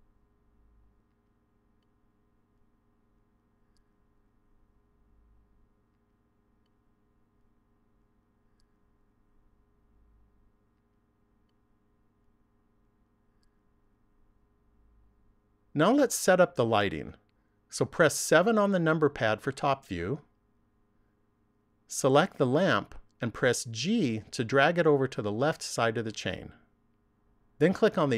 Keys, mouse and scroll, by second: 14.1 click, 18.5 KP_7, 21.9 right click, 23.1 g, 25.5 click.